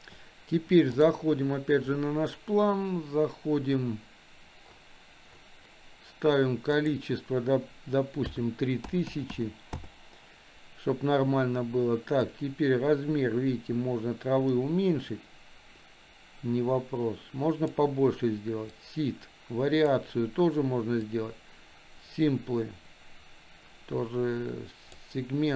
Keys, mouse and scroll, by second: 6.7-9.9 drag, 9.0 KP_0, 12.4-17.8 drag, 18.9 click, 21.2-25.1 drag.